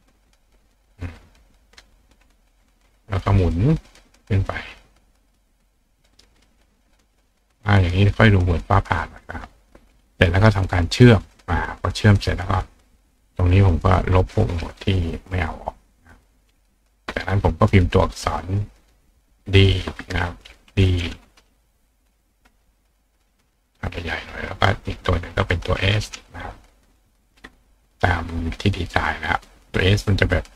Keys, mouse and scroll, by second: 6.7-8.6 drag, 9.2 shift+click, 10.6 click, 11.3 click, 11.8 click, 12.6 click, 13.3-14.5 drag, 15.5-16.3 drag, 16.8 click, 18.8 click, 19.5 click, 23.4 click, 24.5 click, 27.8 click, 29.9 click.